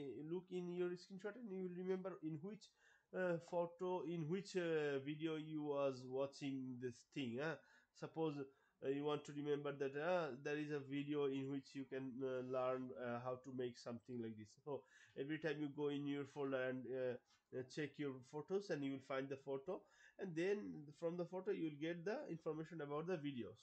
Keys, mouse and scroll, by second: 22.1 click.